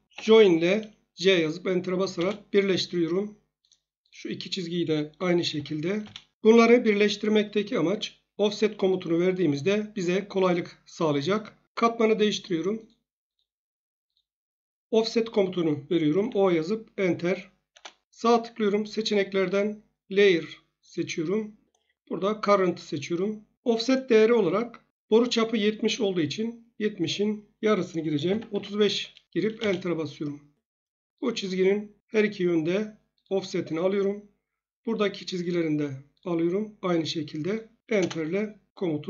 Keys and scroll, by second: 0.1 j, 2.1 Return, 5.5 j, 6.0 Return, 16.2 o, 17.7 Return, 28.2 typing, 29.5 Return, 37.9 Return.